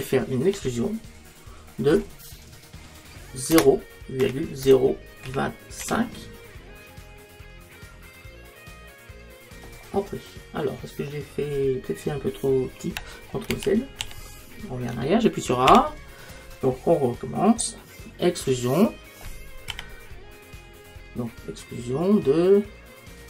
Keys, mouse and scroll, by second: 0.6 e, 13.6 ctrl+z, 15.7 ctrl+z, 15.7 a, 16.7-18.7 drag, 19.7 e.